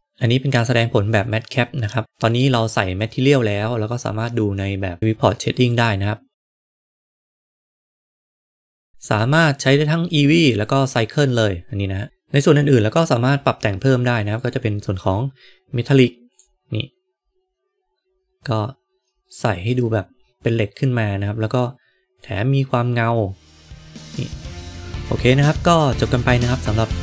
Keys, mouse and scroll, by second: 5.6 click, 14.4-17.4 drag, 22.1-24.5 drag.